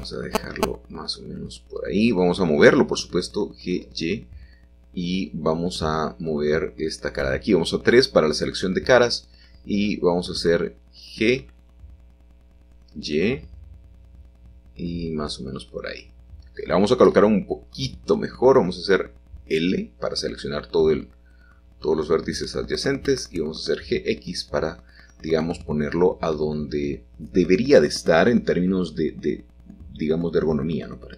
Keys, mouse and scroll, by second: 0.0-1.2 drag, 1.2 middle click, 2.1 g, 2.3 y, 3.7-4.9 drag, 4.9 middle click, 6.2 3, 6.7-8.6 drag, 8.8-10.0 drag, 10.0 middle click, 11.0 g, 12.3 y, 14.8 click, 16.6-18.0 middle drag, 17.0-18.0 scroll up 1, 19.0 l, 20.4 g, 21.0 x, 23.3-27.2 shift+drag, 27.2 middle click, 29.0 shift+d, 29.3 Escape, 29.6 g, 30.1 x.